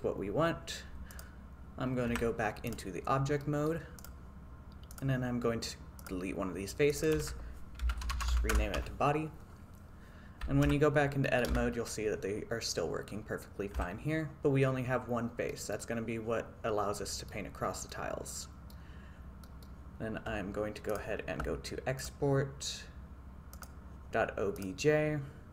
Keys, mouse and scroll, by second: 1.2 click, 2.2 Tab, 3.5-3.8 middle drag, 4.1-5.2 drag, 7.0-8.6 drag, 10.8 Tab, 11.3 middle click, 11.6 a, 13.9 Tab, 15.6 middle click, 17.1 middle drag, 17.9-18.8 middle drag, 19.5 middle click, 20.9-23.8 drag.